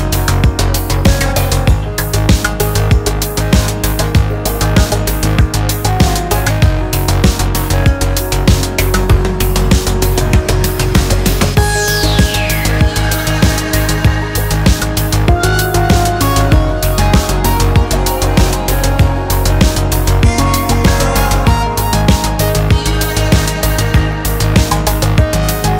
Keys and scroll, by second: 2.0 Return, 4.4 Return, 8.6-10.4 typing, 10.5 Return.